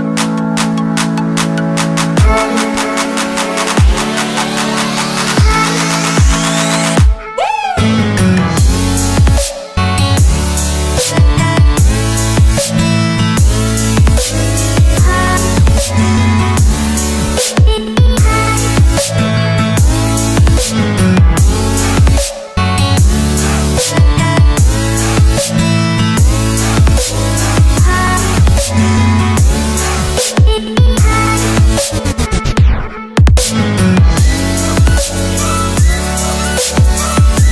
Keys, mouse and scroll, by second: 0.8 click, 27.2 Return, 28.7 click, 33.4 right click, 35.4 click.